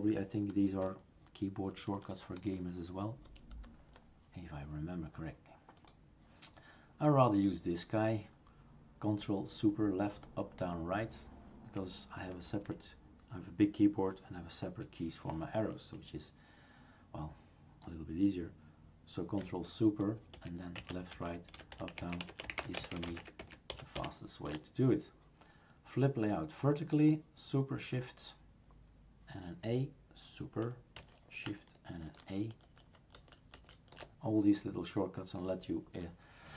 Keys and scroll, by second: 20.3 ctrl+super+Right, 22.6 ctrl+super+Up, 22.8 ctrl+super+Left, 32.0 shift+super+a, 32.7 shift+super+a, 33.2 shift+super+a.